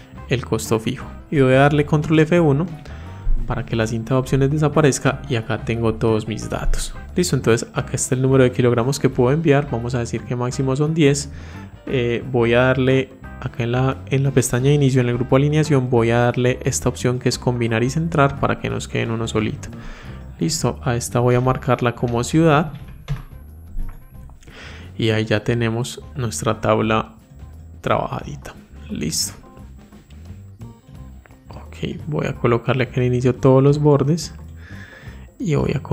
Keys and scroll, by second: 1.7 ctrl+F1.